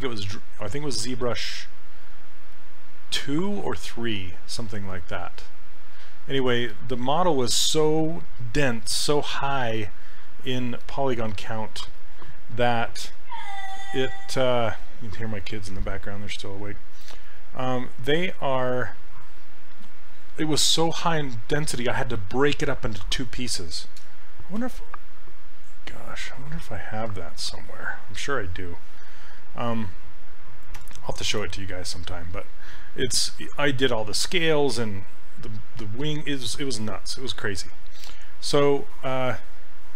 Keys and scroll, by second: 30.8 s.